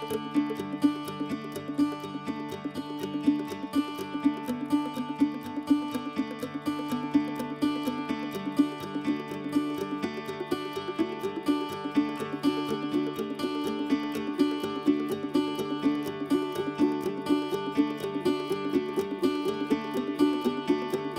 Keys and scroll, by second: 3.7 6, 4.3 6, 12.5 e, 13.3 Escape, 14.3 r, 17.1 Escape, 17.4 ctrl+a, 17.8 ctrl+h, 18.7 r, 20.2 f.